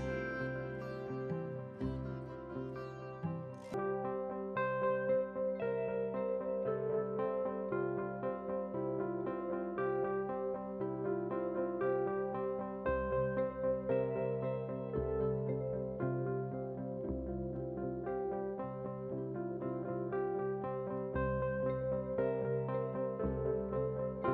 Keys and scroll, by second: 0.6 ctrl+a, 1.0 ctrl+v.